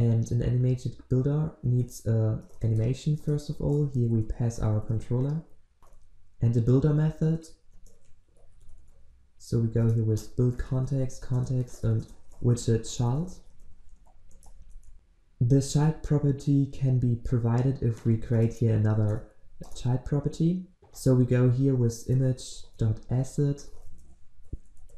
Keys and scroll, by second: 3.2 Return, 9.9 Return, 19.7 Return.